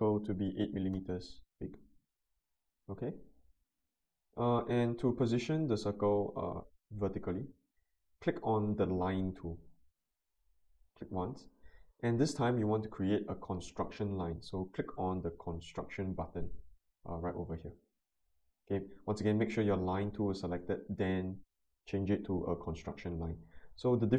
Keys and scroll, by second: 0.7 8, 0.9 Return.